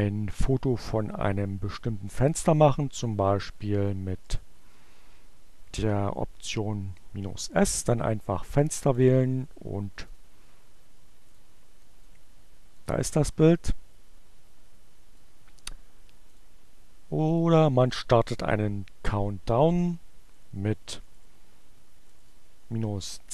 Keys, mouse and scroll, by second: 0.8 Up, 2.9 Left, 3.8 Left, 4.4 s, 4.6 space, 6.1 Return, 8.8 click, 9.8 click, 11.2 click, 11.8 click, 12.4 click, 15.2 click, 16.3 click, 17.4 click, 18.9 Up, 20.0 Left, 21.6 Delete, 22.3 c.